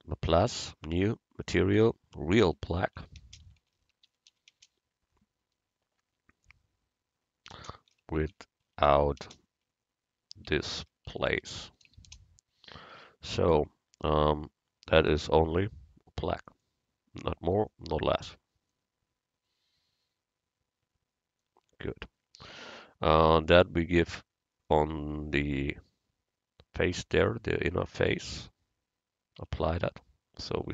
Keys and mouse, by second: 15.0-16.8 drag, 24.0 Tab, 28.1-29.4 drag, 29.4 Tab.